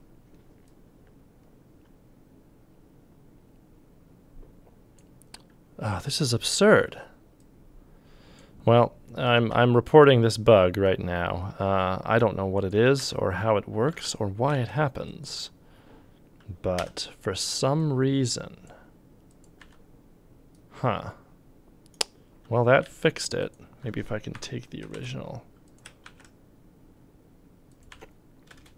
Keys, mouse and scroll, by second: 6.8 g, 9.3 f, 9.5 f, 13.0 c, 13.9 g, 14.5 ctrl+z, 16.8 m, 19.6 c, 22.8 ctrl+z, 24.4 F5, 24.4 F5, 24.4 click, 24.9 ctrl+c, 26.1 ctrl+v, 27.9 c, 28.5 space.